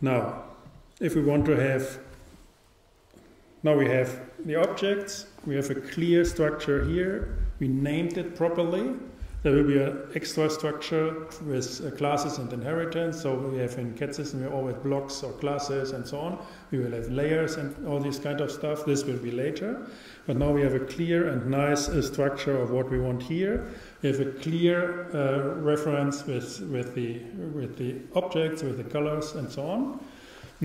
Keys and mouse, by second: 0.7-2.7 drag.